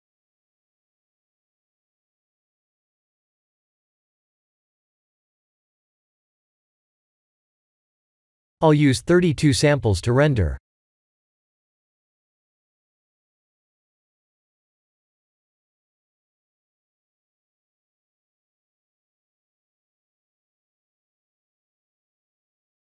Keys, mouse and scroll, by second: 5.7 click, 7.4 click, 19.6 click.